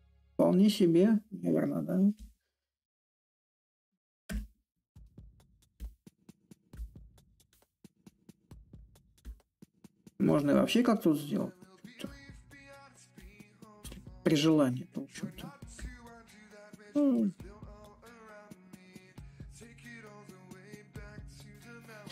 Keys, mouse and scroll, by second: 1.4 click, 4.0-9.1 drag, 11.8-16.9 drag, 17.1-22.1 drag.